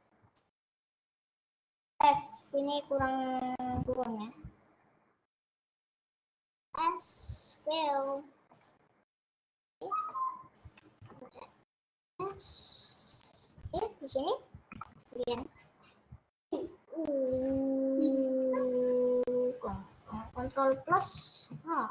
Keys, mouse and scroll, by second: 0.9 click, 3.3 click, 5.8 shift+click, 6.5 s, 9.8 middle click, 10.5-10.9 scroll down 1, 11.1 ctrl+z, 12.3 s, 14.4 click, 14.6 scroll up 2, 14.7-20.9 middle drag, 20.9 KP_Subtract.